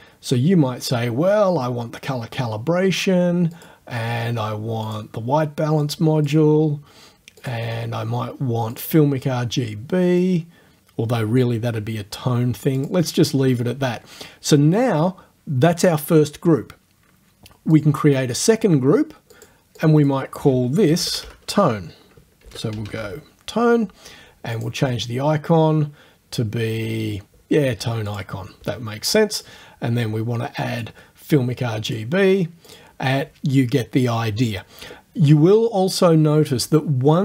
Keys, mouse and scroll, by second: 0.7-1.0 scroll down 2, 1.6 scroll up 2, 3.6 click, 4.9 click, 5.9 click, 7.4 click, 8.7 click, 10.2-11.6 drag, 12.8 click, 17.8 click, 19.4 click, 19.7 middle click, 19.8 click, 20.9 BackSpace, 22.2-23.5 typing, 24.5 click, 28.1 click, 29.4 click, 30.9-32.1 drag, 32.7 click.